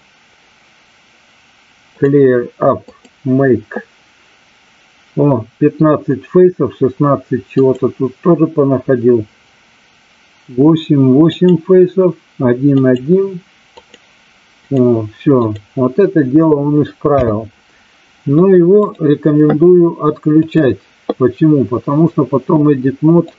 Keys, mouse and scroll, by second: 1.8 click, 2.9 click, 11.3 click, 12.7 click, 13.8 click, 14.6 click, 17.1 n, 18.8-20.7 drag.